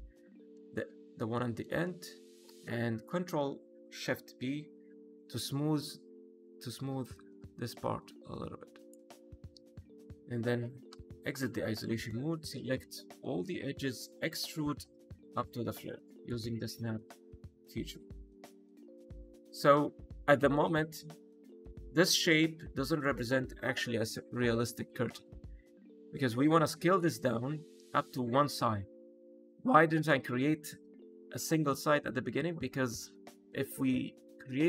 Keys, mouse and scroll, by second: 0.5 shift+middle click, 0.8-1.2 scroll up 2, 1.3 middle click, 1.7 shift+middle click, 2.1 scroll up 1, 2.4 middle click, 4.2 ctrl+shift+b, 8.7 click, 9.0-9.4 scroll down 1, 9.4 middle click, 9.8 scroll down 2, 10.1 Tab, 10.8 KP_Divide, 11.7 middle click, 12.2 Tab, 12.7 2, 13.2 a, 14.2 e, 14.6 z, 16.1 click, 16.4 middle click, 16.9 scroll down 2, 17.2 middle click, 17.7 Tab, 18.7 middle click, 19.4 shift+middle click, 19.8 middle click, 20.1 shift+middle click, 20.1-20.7 scroll up 2, 20.7 scroll down 2, 21.0 shift+middle click.